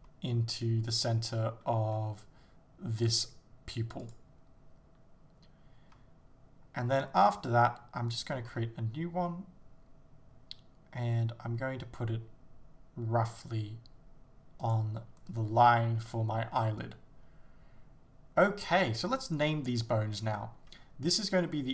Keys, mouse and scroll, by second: 0.0 s, 0.9 g, 4.1 click, 8.4 shift+d, 14.7 click.